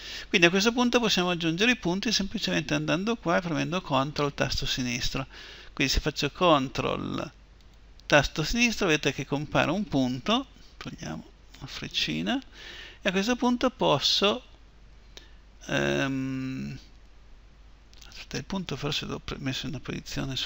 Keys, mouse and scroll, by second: 7.3 click, 9.0 click, 11.3-13.3 drag.